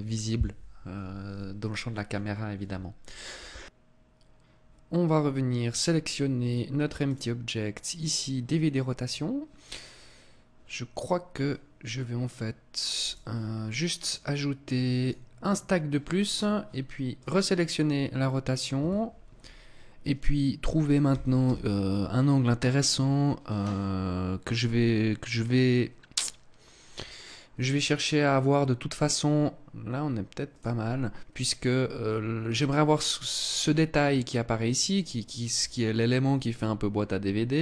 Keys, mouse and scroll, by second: 6.6 click, 12.6 right click, 13.5 click, 14.5 click, 16.7 click, 20.6 r, 30.1 click.